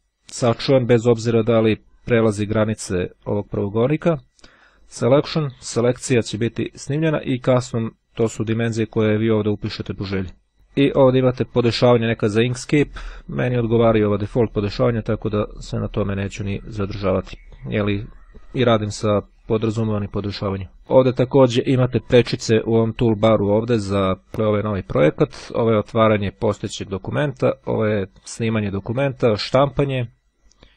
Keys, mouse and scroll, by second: 4.6 click, 7.5 click, 10.1 click, 13.1 click, 17.0-18.4 drag, 19.2 click.